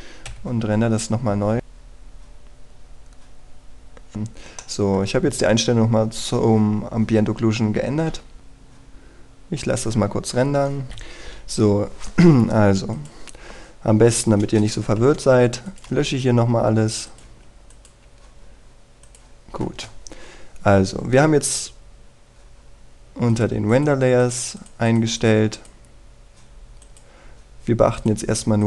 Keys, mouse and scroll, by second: 1.2 F12, 5.5 middle click, 12.0 F9, 13.6 click, 14.1-14.5 scroll down 1, 15.3 click, 15.7 Delete, 16.4 click, 16.6 Delete, 17.8-20.8 drag, 18.0 Delete, 18.8 Delete, 21.3-21.8 scroll down 1, 22.2-26.2 drag.